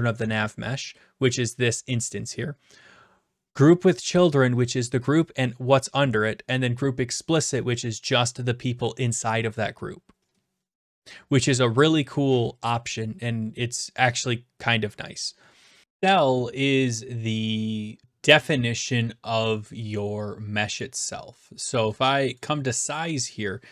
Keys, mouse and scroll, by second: 14.2 click, 15.8 click, 22.4-23.5 right drag.